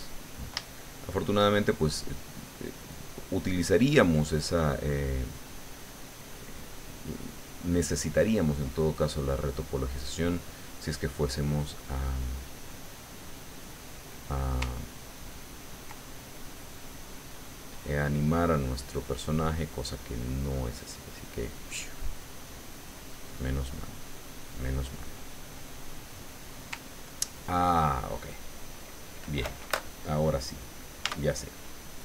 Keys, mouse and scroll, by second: 0.6 shift+middle click, 1.6 shift+click, 2.3 shift+click, 2.9 click, 3.5 click, 4.2 click, 4.8-6.8 drag, 6.9-8.0 middle drag, 8.4 middle click, 9.5 click, 10.8 click, 11.8 click, 13.6 click, 14.8-15.9 ctrl+drag, 16.3-17.5 ctrl+drag, 17.7-21.0 drag, 21.3 click, 21.8 click, 22.5 middle click, 23.4-26.0 middle drag, 26.8 ctrl+click, 27.9 click, 31.3 Tab.